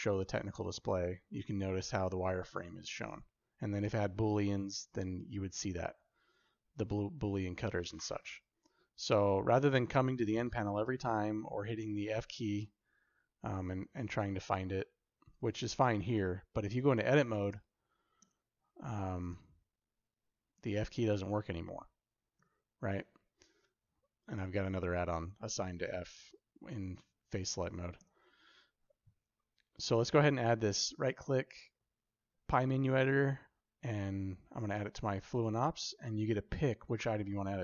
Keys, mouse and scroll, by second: 11.3 f, 18.0 Tab, 19.1 f, 22.2 Tab, 22.2 f, 27.8 Tab, 30.5-37.6 right drag.